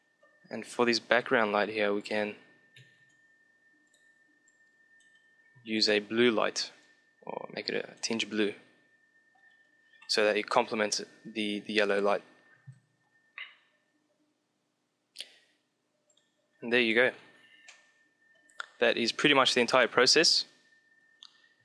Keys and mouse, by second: 1.9-3.7 drag, 2.9 shift+d, 4.4 click, 4.8-7.6 drag, 16.0-17.7 drag, 17.7-19.8 middle drag, 20.2-21.6 middle drag.